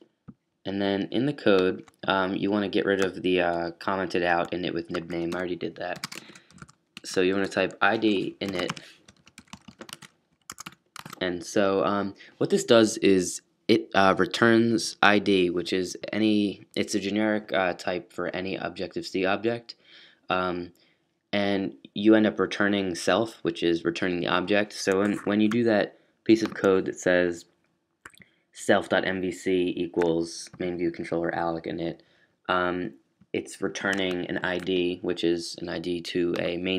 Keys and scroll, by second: 6.2-11.0 typing, 9.8 shift+super+], 13.2 typing.